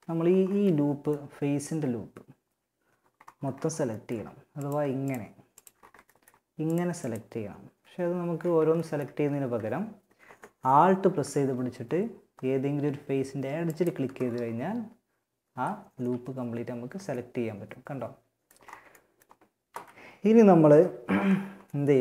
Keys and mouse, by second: 1.7 middle click, 2.3 middle click, 2.7 middle click, 3.3 middle click, 3.8 middle click, 5.9-7.4 right drag, 7.4 ctrl+z, 8.7 a, 12.9-14.7 right drag, 14.7-15.9 middle drag, 15.1 z, 15.9 z, 16.3 right click, 18.9 KP_3, 19.9 KP_1, 20.1 z.